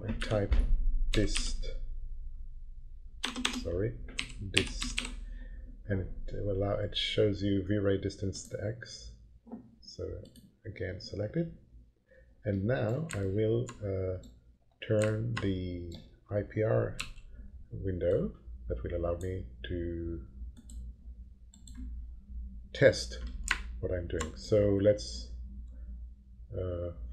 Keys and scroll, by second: 0.2 *, 1.1 s, 1.4 i, 3.2-5.5 typing, 16.9 l.